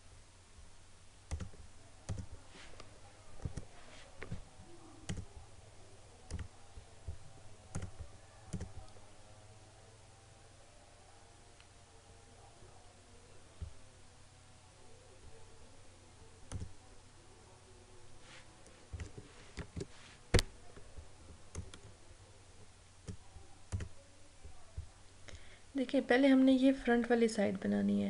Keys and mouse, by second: 2.5 click, 3.4 right click, 5.1 click, 6.3 click, 16.5 click, 18.9 click, 19.6 ctrl+v, 21.7-23.8 drag.